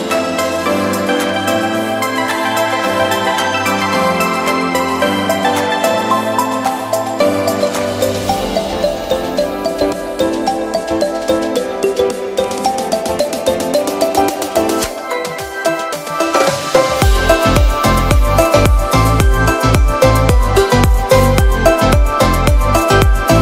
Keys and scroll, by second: 15.2 v.